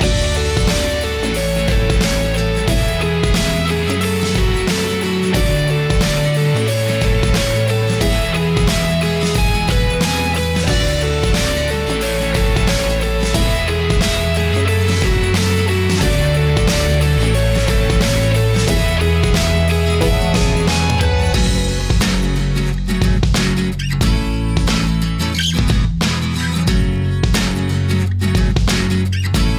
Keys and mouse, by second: 0.1 click, 3.4-4.5 shift+middle drag, 5.2 click, 7.6 shift+middle click, 8.0 shift+a, 15.3 middle click, 16.2 shift+a, 23.0-24.1 drag, 25.0 click, 28.5 click.